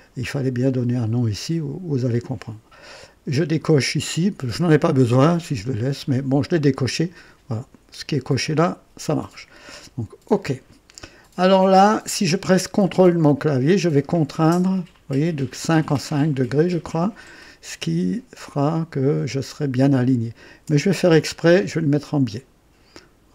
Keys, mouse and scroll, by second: 10.2 click.